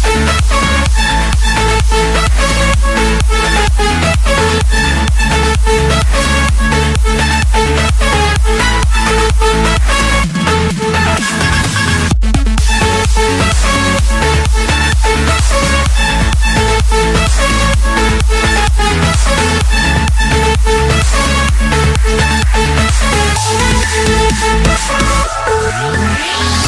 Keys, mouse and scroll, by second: 0.4 typing, 0.9 Return, 2.6-3.8 drag, 4.1 F8, 7.0 1, 7.3 1, 7.8 1, 12.2-14.0 typing, 15.4 Return, 16.6-17.9 scroll up 2, 17.9 scroll up 1, 18.3-19.4 drag, 18.3-19.4 right drag, 23.3-24.9 typing, 25.7 Return.